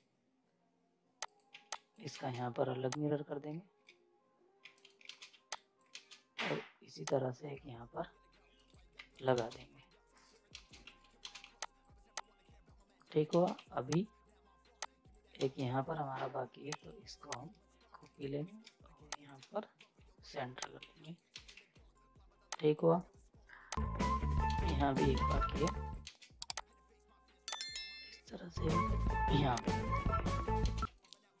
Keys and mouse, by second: 1.2 click, 1.5 z, 1.7 click, 2.1 ctrl+space, 2.9-4.6 drag, 4.6 z, 4.7 right click, 5.1 ctrl+space, 5.3 z, 5.5 click, 5.9 ctrl+space, 7.1-8.5 drag, 8.5 ctrl+right click, 8.9 z, 9.1 right click, 9.3 space, 9.6 z, 10.1 right click, 10.5 ctrl+space, 10.8 z, 10.9 right click, 11.2 ctrl+space, 11.4 z, 11.6 click, 12.7 right click, 13.3 ctrl+space, 13.6 z, 13.9 click, 15.4 ctrl+space, 16.7 click, 18.0 ctrl+right click, 19.1 click, 19.8 c, 20.6 click, 20.6 click, 20.8 z, 21.0 right click, 21.3 ctrl+space, 21.5 z, 21.8 right click, 21.8 right click, 22.5 click, 22.9 right click, 23.8 click, 24.5 ctrl+space, 24.8 z, 24.9 right click, 25.1 space, 25.3 z, 25.7 click, 26.0 ctrl+space, 26.5-28.9 drag, 28.9 ctrl+right click, 29.3 z, 29.6 click, 30.3 right click, 30.6 space, 30.8 z, 30.9 right click.